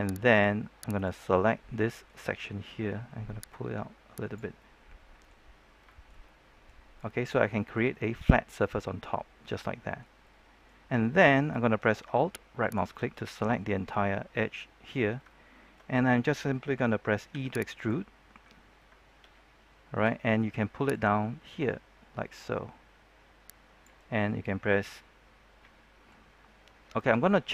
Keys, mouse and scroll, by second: 0.2 right click, 1.3-2.9 middle drag, 3.4 click, 4.5 middle click, 5.6 scroll down 1, 5.8 shift+middle click, 6.8 scroll up 1, 7.0 middle click, 7.5-7.9 shift+scroll up 1, 7.9-12.0 middle drag, 12.5 alt+right click, 13.0 middle click, 14.9 scroll down 1, 15.2 shift+middle click, 17.2 e, 17.7 right click, 18.4-18.8 scroll up 1, 20.8-27.5 drag.